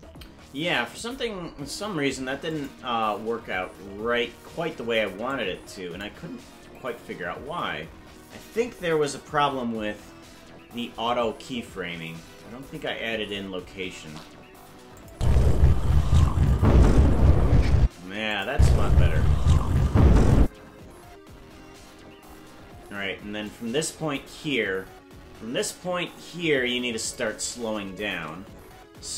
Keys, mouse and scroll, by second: 0.7 click, 2.5 click, 3.5 Left, 5.2 click, 15.0 click, 15.1 space, 17.8 space, 18.3 click, 18.5 space, 20.4 space, 23.4-27.2 drag.